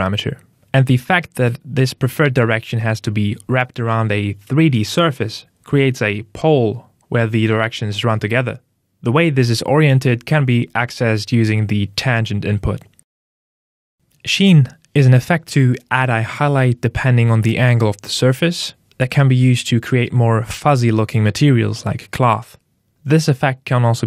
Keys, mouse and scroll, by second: 2.6 click, 3.4 click, 10.9 click, 16.9 click, 22.9 click.